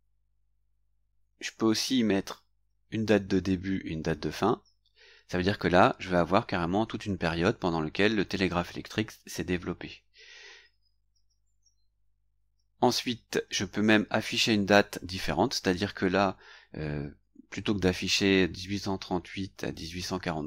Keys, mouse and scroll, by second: 0.0 scroll down 1, 11.9-12.4 scroll up 1.